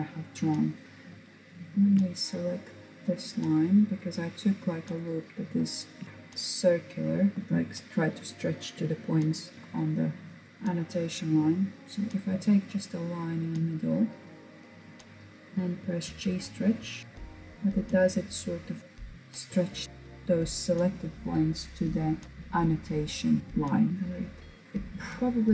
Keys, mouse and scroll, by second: 0.7 Tab, 1.2 shift+click, 2.0 shift+click, 2.6 shift+click, 3.4 shift+click, 4.0 shift+click, 4.5 shift+click, 5.9 shift+click, 9.5-12.2 middle drag, 15.1 click, 16.0-16.4 scroll down 2, 16.4-18.3 middle drag, 18.8 KP_1, 23.4-23.9 scroll up 2, 24.0 click, 24.6 KP_1.